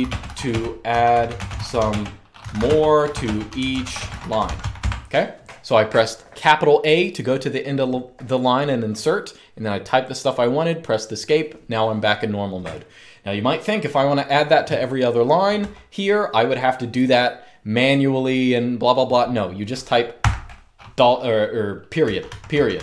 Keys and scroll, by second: 0.0-5.1 typing, 15.3 j, 19.9 ., 21.7-22.8 typing.